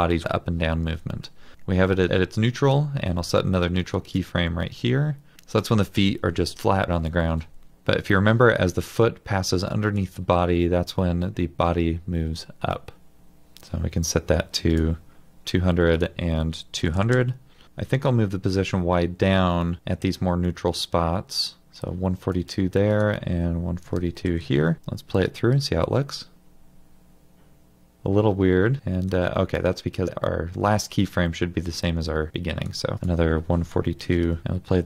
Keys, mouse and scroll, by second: 16.5-17.5 typing, 23.9 typing, 24.4 Return, 34.1 typing.